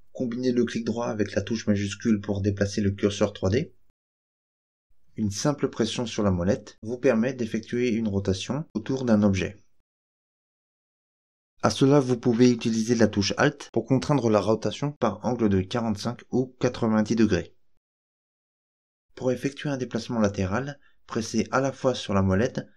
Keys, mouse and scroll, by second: 0.4 shift+right click, 1.5 shift+right click, 2.2 shift+right click, 3.0 shift+right click, 3.7 shift+right click, 4.5 shift+right click, 5.5-11.5 middle drag, 12.3-19.0 middle drag, 19.2-22.7 shift+middle drag.